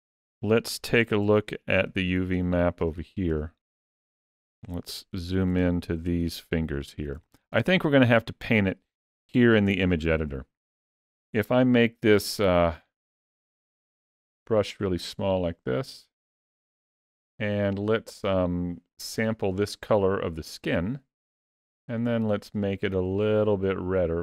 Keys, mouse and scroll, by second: 0.6 ctrl+middle click, 1.3 shift+middle click, 1.8 ctrl+middle click, 2.7 shift+middle click, 3.2 ctrl+middle click, 3.7 shift+middle click, 4.5 ctrl+middle click, 5.0 ctrl+middle click, 5.5 shift+middle click, 6.1 ctrl+middle click, 6.6 ctrl+middle click, 7.1 shift+middle click, 7.7 ctrl+middle click, 11.3 f, 18.0 click, 21.5 click, 22.6 click.